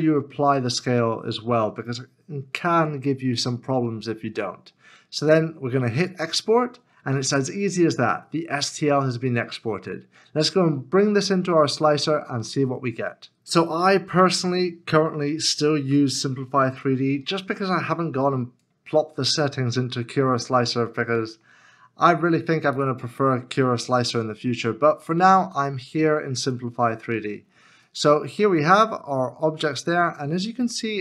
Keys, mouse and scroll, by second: 20.9 e, 22.0 middle click, 23.9 scroll up 1, 25.0 shift+right click, 26.8 scroll up 1, 28.1 right click.